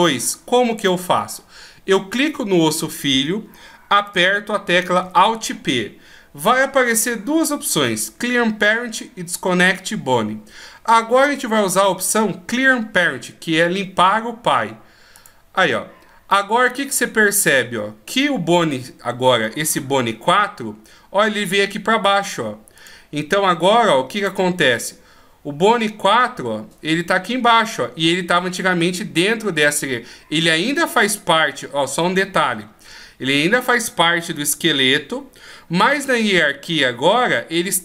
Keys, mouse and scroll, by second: 5.0 alt+p, 22.8 click, 24.2 click.